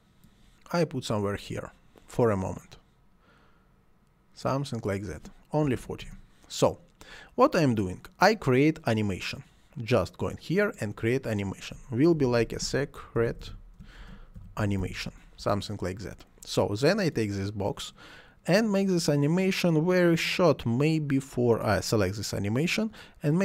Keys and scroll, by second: 5.7 4, 6.1 Return, 11.9-15.3 typing, 15.4 Return.